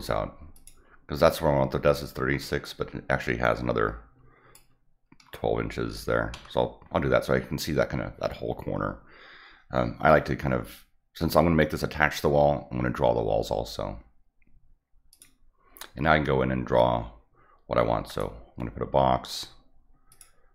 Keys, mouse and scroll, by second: 0.5 click, 2.6-4.5 drag, 15.1 click, 18.1 click, 20.1 click.